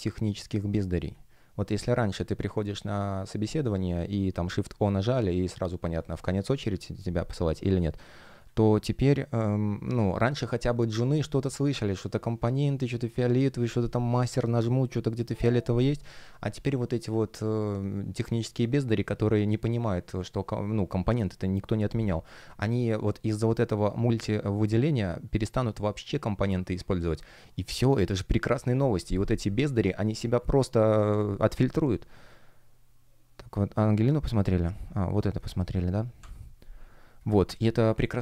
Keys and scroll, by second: 36.1 Escape.